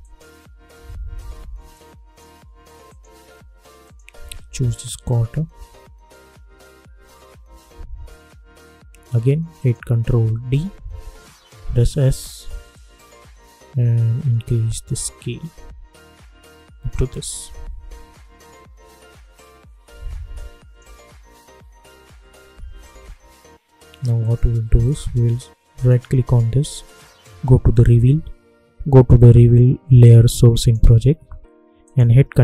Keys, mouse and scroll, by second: 4.4 space, 7.3 space, 9.5 click, 10.4 ctrl+d, 11.5 s, 12.7-17.8 drag, 17.8 space, 19.8 space, 20.3 click, 20.7 space, 22.9 space, 24.1 click, 25.7 right click, 30.5 click.